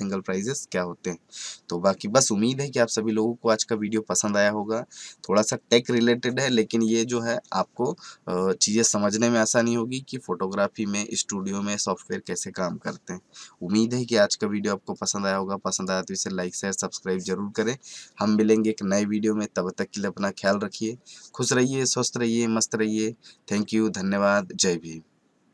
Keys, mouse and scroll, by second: 14.9 click.